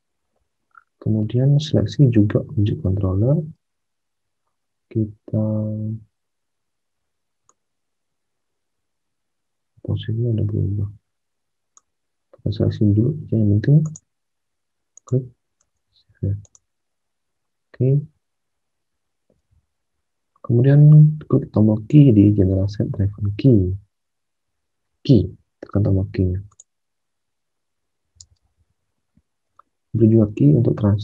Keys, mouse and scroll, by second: 3.6 alt+Tab, 19.3 alt+Tab, 23.0 alt+Tab, 28.2 alt+Tab.